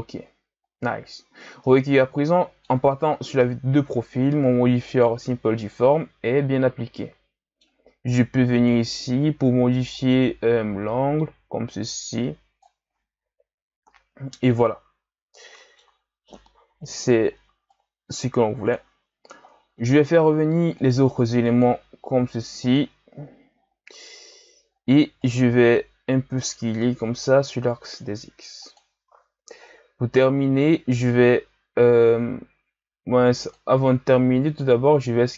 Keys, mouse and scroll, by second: 1.6-6.4 middle drag, 8.5-13.0 drag, 13.4 KP_1, 15.6-16.7 middle drag, 16.7 KP_1, 17.7-20.7 drag, 20.8 click, 21.5 click, 22.6 click, 23.6-24.2 scroll down 4, 24.2 a, 24.7-25.2 scroll up 4, 25.2 right click, 26.5 s, 29.0 a, 29.7-30.6 scroll down 3, 30.6-33.4 scroll down 3, 33.4 click, 34.5 click.